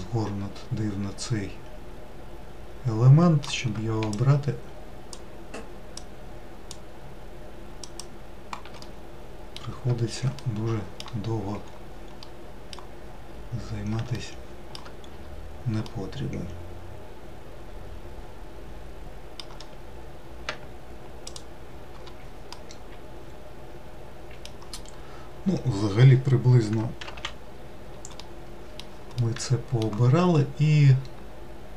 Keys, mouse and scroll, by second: 4.8 shift+click, 6.4 shift+click, 8.6-11.0 middle drag, 11.0-11.9 scroll down 2, 12.1 middle click, 13.0-13.3 scroll up 2, 13.9 shift+middle click, 14.8 scroll up 2, 15.6-18.6 middle drag, 21.1 shift+click, 22.3-24.6 middle drag, 24.6 scroll down 3, 26.8 alt+z, 27.2-27.6 scroll down 3, 27.9-30.1 middle drag, 30.1 scroll up 2.